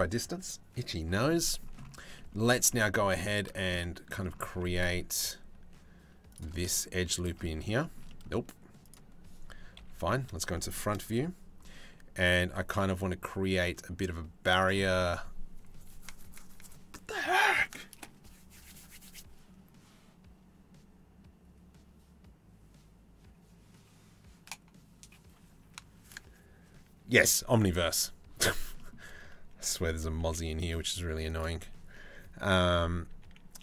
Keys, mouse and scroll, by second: 0.9 middle click, 1.6 Tab, 1.7 middle click, 2.1 Tab, 2.3 middle click, 2.8 3, 3.2 shift+middle click, 4.1 z, 5.9 middle click, 7.0 middle click, 7.4 shift+middle click, 7.7 middle click, 8.4 click, 9.4 KP_3, 10.3 shift+middle click, 11.5 c, 14.4 click, 29.8 shift+d, 30.9-33.3 drag.